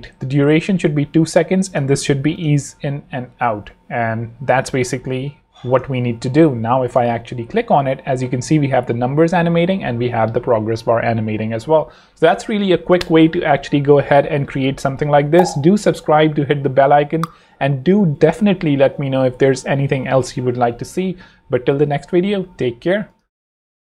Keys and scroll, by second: 5.7 super+Return.